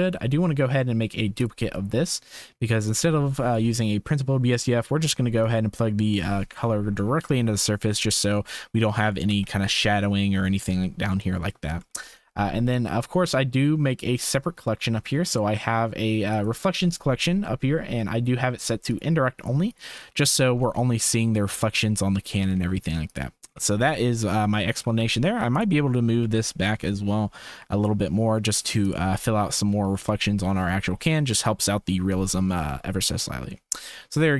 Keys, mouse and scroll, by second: 2.2 click, 2.8 click, 5.0 typing, 5.4-6.5 drag, 7.0 click, 8.1 shift+click, 9.6 ctrl+s, 11.2 shift+click, 12.2 ctrl+s, 13.9 click, 16.3 click, 18.5 click, 18.9 click, 19.3 click, 19.7 click, 23.0 click, 24.0 shift+click, 24.4 Tab, 24.6 2, 25.5 alt+click, 26.2 g, 30.0 shift+middle click.